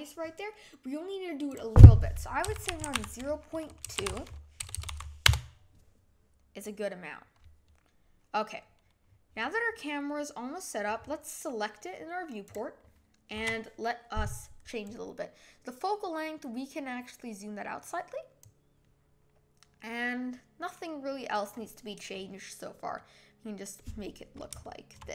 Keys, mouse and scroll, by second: 5.3 BackSpace, 9.0-9.4 scroll down 1, 9.4 scroll up 1, 12.5 click, 15.0-17.9 drag, 23.0-25.1 middle drag.